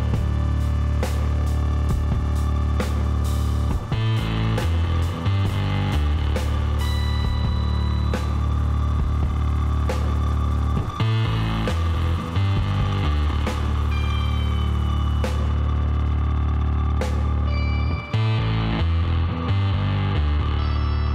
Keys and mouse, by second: 1.8 Tab, 5.2-8.9 middle drag, 8.9 KP_3, 9.6 z, 11.5-13.5 drag, 12.5 b, 15.5 b, 16.8-18.8 drag, 19.0 b.